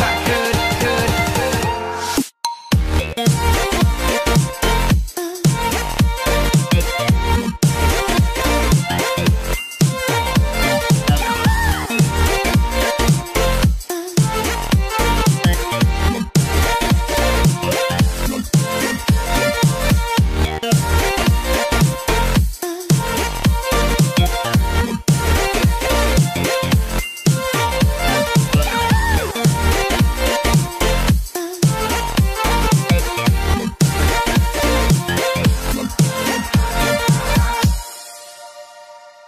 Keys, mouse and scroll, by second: 0.5 click, 1.6 s, 1.8 z, 3.0 KP_0, 3.6 click, 4.3-5.6 middle drag, 6.5 shift+z, 7.7 ctrl+z, 8.0 ctrl+z, 8.7 ctrl+z, 9.2 ctrl+z, 9.4 ctrl+z, 9.9 ctrl+z, 10.2 ctrl+z, 11.6 ctrl+z, 12.2 click, 13.5 middle click, 14.4 shift+z, 14.7 middle click, 15.4-16.0 scroll down 2, 15.7 middle click, 16.2 scroll up 1, 16.3 middle click, 16.6-17.1 scroll down 1, 17.1-17.6 scroll up 2, 17.7 click, 18.8 click, 20.1 click, 20.4 middle click, 22.3 KP_1, 23.1 click, 23.9 click, 25.4 Delete, 26.8-27.9 drag, 29.0 click, 29.8 shift+z, 30.1 middle click, 31.1 KP_3, 32.1 click, 32.8 Delete, 34.2 middle click, 35.5-36.5 drag, 36.6 click, 37.6 alt+shift+click, 38.5-39.2 drag.